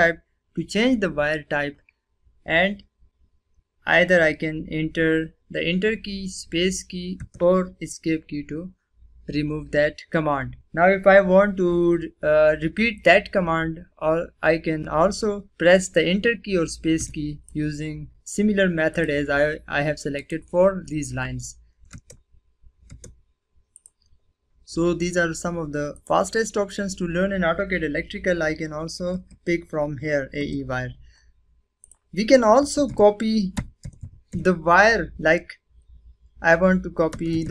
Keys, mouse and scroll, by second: 7.1 Return, 16.9 Return, 17.4 click, 20.1 right click, 21.9 space, 23.7 click, 25.9 click, 26.0 right click, 29.3 click, 31.8 click, 32.3-34.7 typing, 36.8-37.5 typing.